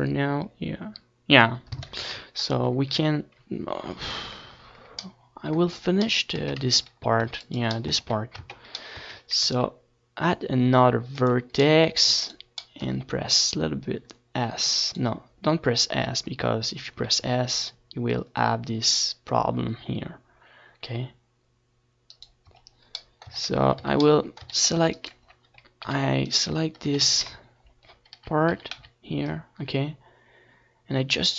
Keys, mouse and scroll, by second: 0.0 z, 16.2 KP_1, 16.9-20.5 middle drag, 20.6 Tab, 21.4 Tab, 22.5 Tab, 23.1 a, 23.5 ctrl+r, 26.5-28.1 right drag, 26.6-28.0 drag, 27.3 s, 28.1 middle click, 29.1-30.4 right drag, 31.1 s.